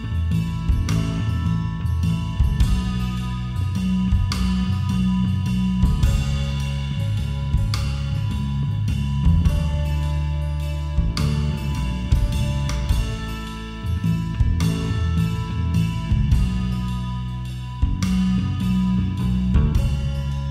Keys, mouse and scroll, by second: 0.0 middle click, 0.3 g, 2.1 a, 2.4-3.7 middle drag, 4.2-6.3 middle drag, 6.3 KP_5, 6.5 KP_1, 8.0 KP_5, 8.1 KP_1, 10.0 click, 10.2 click, 10.4-19.6 drag.